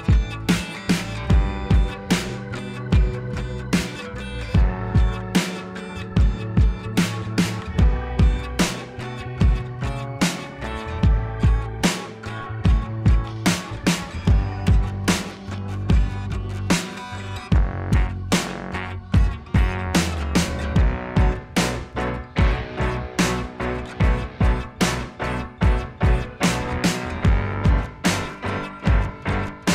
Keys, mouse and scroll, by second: 0.4 ], 0.5 click, 1.0 [, 1.1 [, 1.1 [, 2.9-4.4 typing, 3.0 click, 8.4-10.0 typing, 8.8 click, 9.1 click, 13.5-16.0 typing, 13.7 click, 14.0 click, 20.2 z, 20.4 click, 20.5 z, 20.6 click, 20.6-21.0 z, 21.5 click, 21.6-21.9 z, 22.7 click, 24.6 click, 24.8 Return, 25.6 click, 27.5 click, 28.7 click, 29.3-29.7 typing.